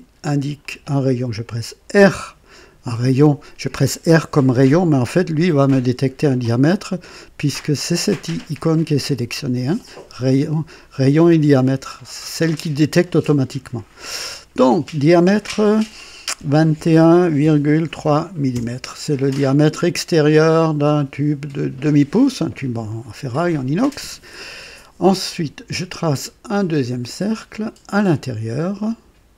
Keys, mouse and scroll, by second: 0.6 click, 1.9 r, 16.4-17.9 typing, 18.5 KP_Enter, 19.7-20.0 scroll up 1, 20.5 scroll up 1, 21.0 middle click, 27.6 click.